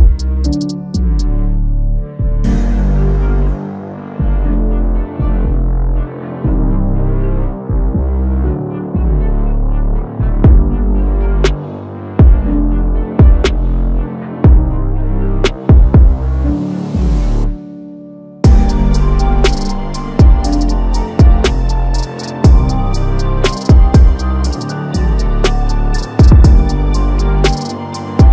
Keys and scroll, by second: 2.1 ctrl+t, 11.9 ctrl+t, 12.4 ctrl+t, 13.2 ctrl+t, 17.8 ctrl+t, 23.8 ctrl+a.